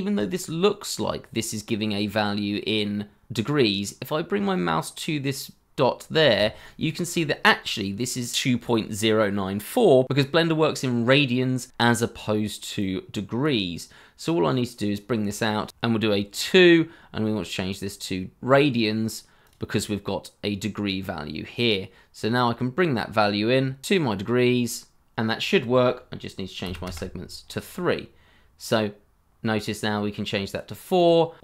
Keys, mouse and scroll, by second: 15.7 t, 24.9 scroll down 1, 26.6 3, 26.8 Return, 30.9 double click.